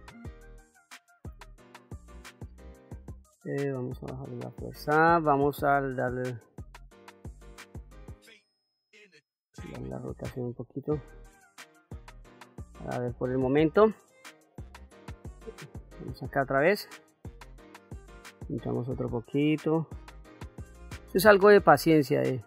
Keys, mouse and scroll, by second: 10.4-13.1 middle drag, 15.5 click, 16.3 middle click, 18.1 click, 18.4-19.5 drag, 19.6 middle click, 20.3-22.4 drag.